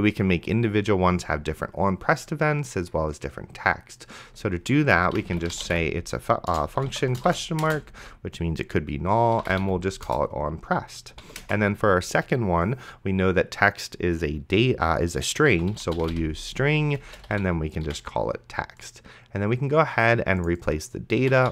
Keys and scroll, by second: 5.1-8.0 typing, 9.1-10.1 typing, 11.2 ,, 11.4 space, 15.5-18.4 typing, 21.1-21.5 typing.